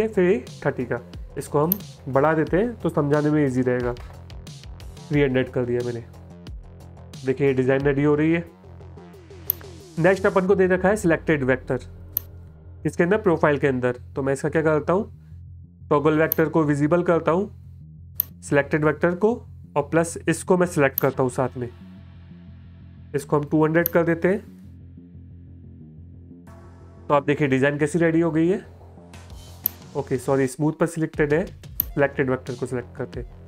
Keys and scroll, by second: 1.7 BackSpace, 2.0 BackSpace, 2.1 BackSpace, 3.5 KP_3, 3.8 KP_0, 6.5 space, 24.8 shift+Right, 25.1 shift+KP_2, 28.1 space, 29.5 space.